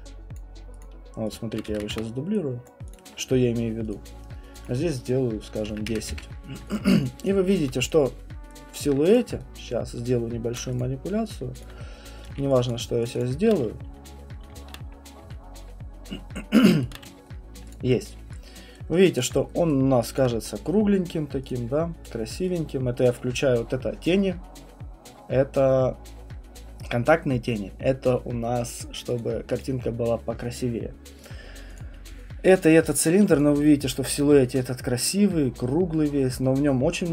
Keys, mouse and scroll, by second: 0.3 click, 0.8 click, 1.3 click, 1.7 ctrl+d, 1.9 w, 2.7 click, 2.9 click, 3.9 click, 4.6 click, 5.4-6.4 typing, 6.7 click, 7.6 alt+middle click, 8.8 alt+click, 9.1 click, 10.8 click, 11.3 click, 11.6 alt+click, 12.2 right click, 12.3 q, 12.5 click, 12.7 click, 13.2 shift+click, 16.8 shift+right click, 17.5 right click, 17.7 click, 19.2 click, 19.7 right click, 20.2 alt+click, 21.5 click, 22.5 click, 29.2 click, 29.6 click, 31.2 click, 31.8 click, 32.6 click, 32.9 click, 33.4 click, 33.9 alt+click, 34.5 alt+click, 36.3 click.